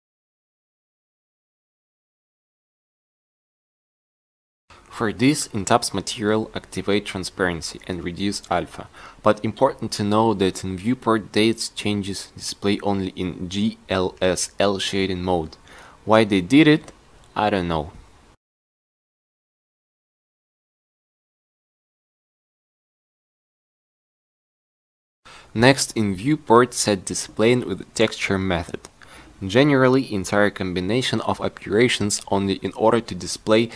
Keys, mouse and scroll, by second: 2.8-3.8 drag, 10.2 n, 18.4-20.4 drag, 20.4 Tab, 27.3 Tab, 32.5 n.